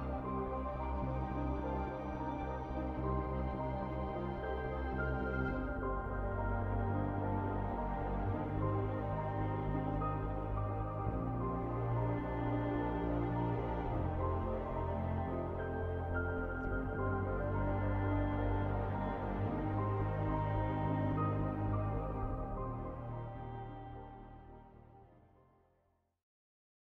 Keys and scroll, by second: 26.3 ctrl+s.